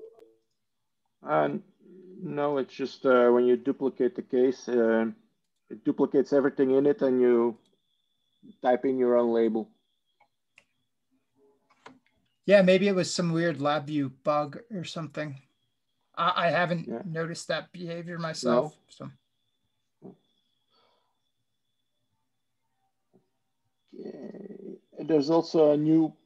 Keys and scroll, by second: 1.6 Tab, 1.9 Tab, 12.3 Tab, 12.4 Tab.